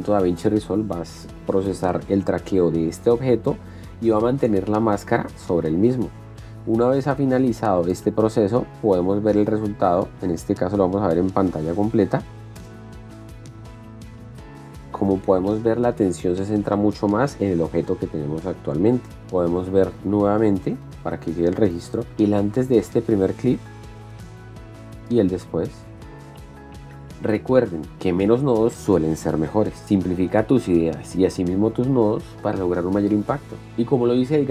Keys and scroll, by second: 12.0 p, 13.0 space, 19.1 shift+d, 21.2 shift+p, 22.1 shift+d, 23.5 space.